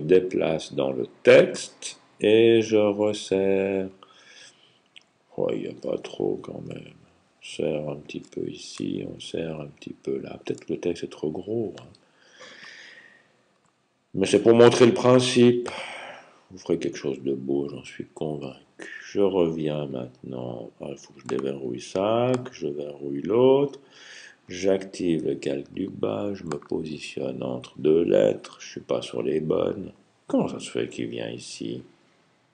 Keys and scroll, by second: 0.1 Right, 0.1 Left, 1.7-2.5 typing, 1.9 Left, 2.8 alt+Left, 3.1 alt+Left, 3.2 alt+Left, 3.4 alt+Left, 3.5 alt+Left, 3.7 typing, 4.8 Right, 6.0 alt+Right, 6.8 typing, 7.3 alt+Left, 8.1-9.8 typing, 12.9 typing.